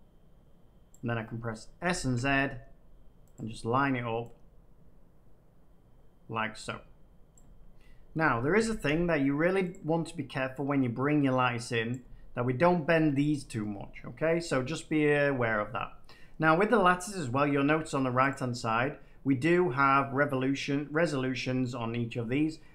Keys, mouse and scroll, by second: 0.8 click, 1.9 s, 2.1 z, 3.3 click, 7.3 click, 8.5 s, 8.8 z, 9.7 click, 11.8 click, 18.2 click, 20.6 middle click.